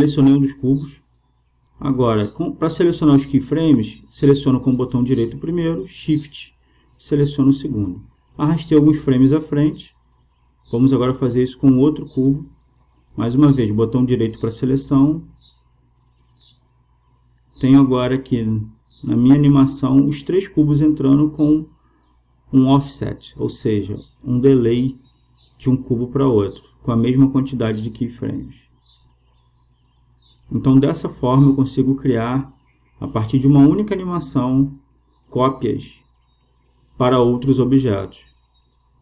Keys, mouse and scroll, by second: 2.5-4.3 drag, 3.9-5.7 right drag, 5.8-7.5 right drag, 8.4 g, 12.8-15.4 right drag, 14.9 g, 17.7-19.5 drag, 23.0-27.5 drag, 38.3 click.